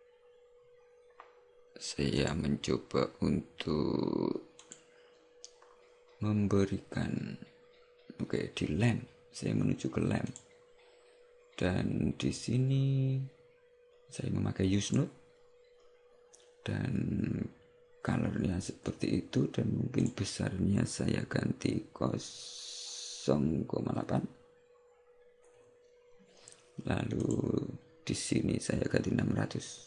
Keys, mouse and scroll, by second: 4.9 click, 10.4 click, 15.0 click, 20.1 click, 27.3 click.